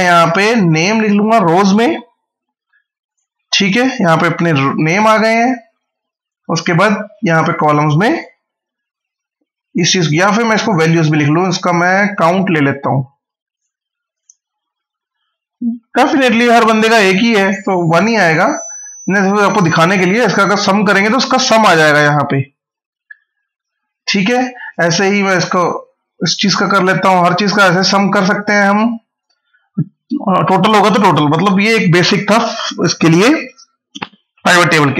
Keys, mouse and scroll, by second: 0.2 click, 2.1 scroll up 1, 2.9 click, 3.2 scroll up 1, 5.5 scroll down 1, 5.8 scroll up 1, 6.6 click, 9.9 click, 15.8 scroll down 1, 16.6-17.1 scroll up 1, 18.0 click, 24.5 click, 27.4 scroll down 1, 27.9 scroll up 1, 28.2 click, 28.6 scroll down 1.